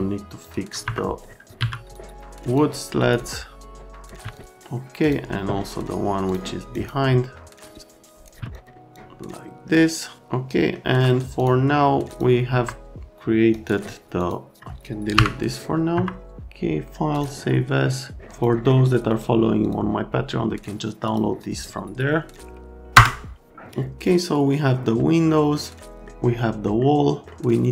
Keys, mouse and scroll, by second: 0.4 click, 0.8 F3, 1.5 1, 1.9 click, 2.5 click, 3.0 right click, 3.7 click, 4.2 1, 4.4 click, 5.2 click, 6.3 click, 6.7 click, 7.6 middle click, 8.2 scroll, 8.4 1, 8.5 middle click, 8.9 middle click, 10.2 alt+middle click, 11.3 click, 12.1 click, 12.5 F3, 13.5 click, 14.1 click, 15.1 Delete, 15.9 F3, 17.1 click, 18.2 click, 19.1 click, 19.6 click, 21.0 click, 22.3 click.